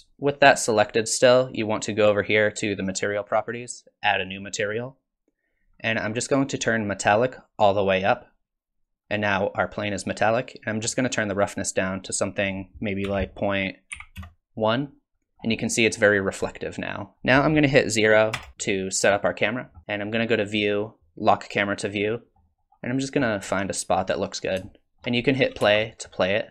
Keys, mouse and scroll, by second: 0.1 click, 3.0 click, 4.4 click, 5.7-7.2 scroll down 4, 7.2 click, 7.2 scroll down 1, 11.5 click, 12.4 click, 15.3 scroll down 3, 15.6 middle click, 16.1-16.5 scroll up 5, 16.5 middle click, 17.2-18.4 scroll down 2, 18.4 KP_0, 20.1 click, 21.5 click, 22.3-23.1 scroll up 9, 23.5 shift+middle click, 24.1-24.6 scroll up 2, 24.6 shift+middle click, 25.6 space.